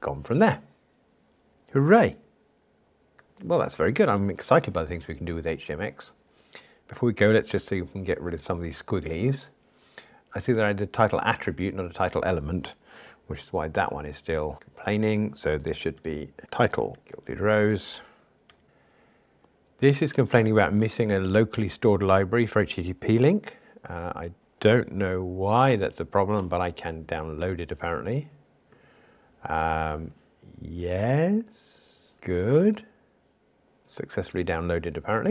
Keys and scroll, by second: 18.6 Tab.